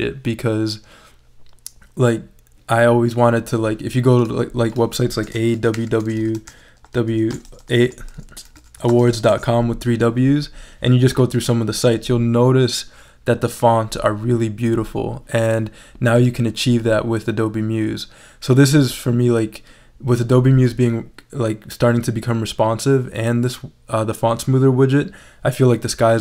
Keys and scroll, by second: 5.3 a, 7.5 BackSpace, 8.5 s.